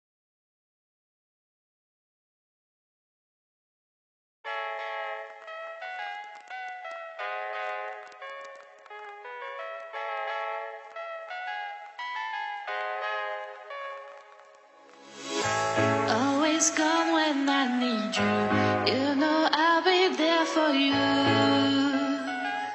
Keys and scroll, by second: 5.7 ctrl+z, 17.0 Delete.